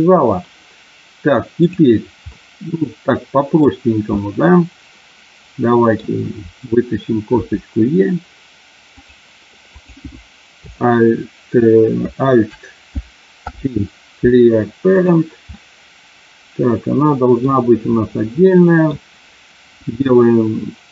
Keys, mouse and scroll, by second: 1.5 click, 2.4-3.6 middle drag, 4.1-6.0 middle drag, 7.4 e, 9.8 click, 13.4 alt+p, 15.5-17.5 middle drag, 18.5 middle click.